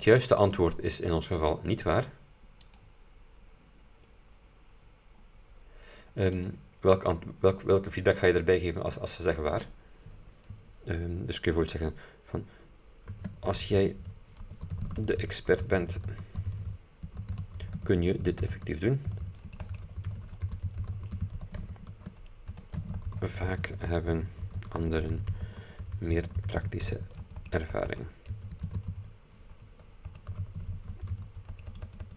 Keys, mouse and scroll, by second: 0.6 click, 1.9 click, 2.7 click, 5.1-5.5 scroll down 2, 6.5 click, 12.9-31.7 typing.